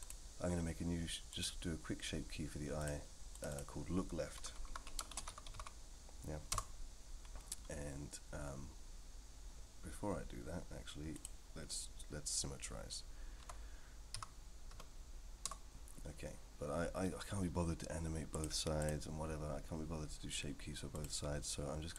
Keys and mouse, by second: 0.0 click, 2.8 click, 3.3 click, 3.5-7.1 drag, 4.6 o, 11.1 click, 13.4 Tab, 14.1 a, 14.7 F3, 18.3-18.9 drag, 20.9 click.